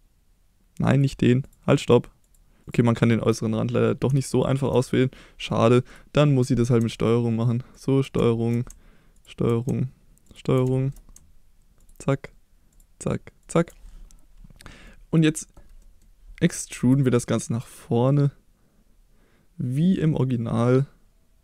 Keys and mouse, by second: 1.0 alt+click, 1.8 alt+click, 2.6 alt+click, 4.3 shift+middle click, 5.9-6.7 drag, 8.3 shift+middle drag, 10.7 shift+middle click, 11.8 ctrl+click, 12.7 ctrl+click, 13.4 ctrl+click, 14.9-15.6 middle drag, 15.8 middle click, 16.8 e.